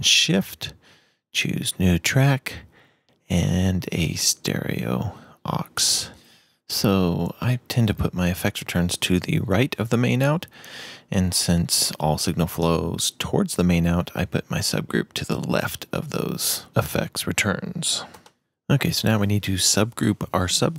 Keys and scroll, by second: 2.5-4.1 typing, 4.2 shift+Return.